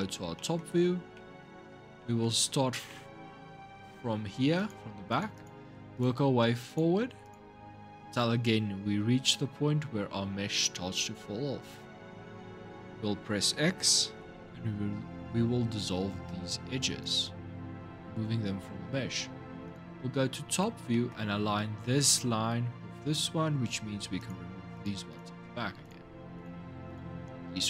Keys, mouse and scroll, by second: 0.1 shift+middle click, 0.6 scroll up 3, 0.9-4.4 middle drag, 4.4 click, 4.9 alt+shift+click, 5.1 alt+shift+click, 5.7 alt+shift+click, 6.5 alt+shift+click, 7.0 alt+shift+click, 13.8 x, 19.4 click, 20.2 scroll up 2, 20.7 shift+middle click, 21.1-23.4 scroll up 2, 24.0 click, 24.5 alt+shift+click, 24.9 alt+shift+click, 25.6 alt+shift+click, 26.1 alt+shift+click, 26.7 alt+shift+click.